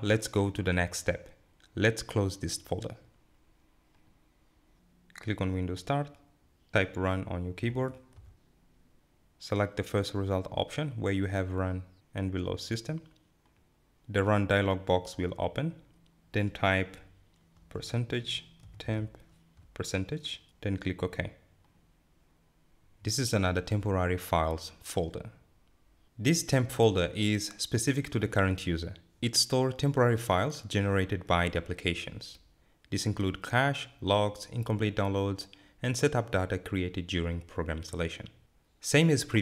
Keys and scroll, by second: 17.4-18.5 typing.